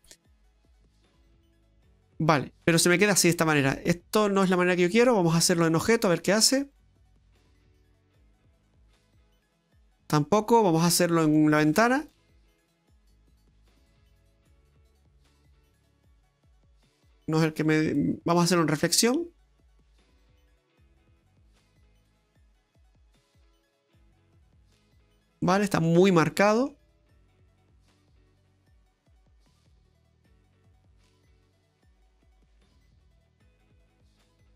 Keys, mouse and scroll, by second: 0.2 middle click, 3.3 middle click, 4.1 scroll down 2, 4.4 middle click, 4.9-5.4 scroll up 5, 5.4 middle click, 6.2 click, 9.0 middle click, 11.4 click, 14.1 middle click, 17.3 click, 18.3 click, 21.2 middle click, 25.2 scroll down 3, 25.4 middle click, 26.1 scroll up 1, 26.4 middle click, 26.8-27.4 scroll up 3, 28.2 click, 30.4 click, 32.9 middle click, 33.7 click.